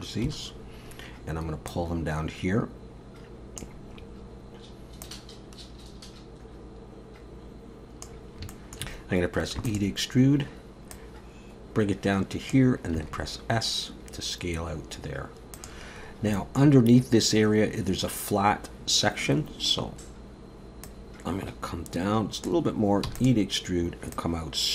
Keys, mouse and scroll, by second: 0.3 KP_7, 1.7 click, 4.0-4.8 scroll up 2, 4.8 scroll up 1, 5.0 click, 8.5 shift+middle click, 9.6 e, 10.9 click, 13.0 s, 16.0 scroll up 1, 16.4 shift+middle click, 19.6-20.9 scroll up 1, 20.9 click, 23.1 e, 24.1 click.